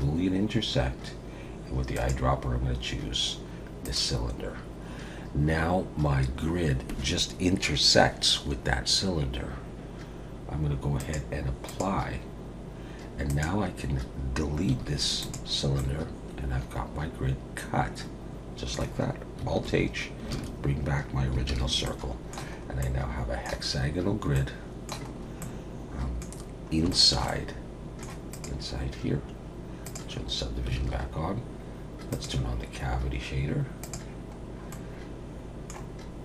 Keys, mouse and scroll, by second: 1.9 click, 11.0 click, 13.3 click, 14.7 x, 15.8 middle click, 19.6 alt+h, 21.5 alt+a, 21.8 middle click, 22.6 scroll up 1, 22.8 middle click, 23.7-24.3 scroll up 3, 24.3 middle click, 25.1-25.5 scroll up 2, 25.4 middle click, 26.3-26.8 scroll down 4, 26.9 shift+middle click, 27.3 middle click, 28.4 click, 29.8 click, 30.8 alt+a, 32.1 click, 34.4-35.2 scroll down 2, 34.7 middle click.